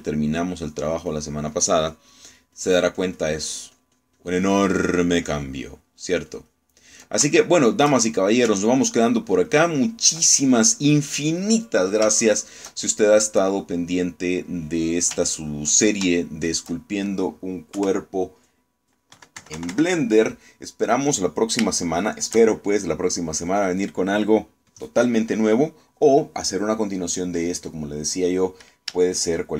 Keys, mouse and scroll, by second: 1.5-8.2 ctrl+drag, 8.4 ctrl+shift+middle click, 9.7-11.0 ctrl+drag, 11.5 ctrl+click, 13.4 shift+middle click, 14.3 click, 15.0 click, 15.7 click, 16.2 ctrl+click, 17.6 shift+middle click, 18.8 KP_1, 20.2 KP_Subtract, 22.8 shift+click.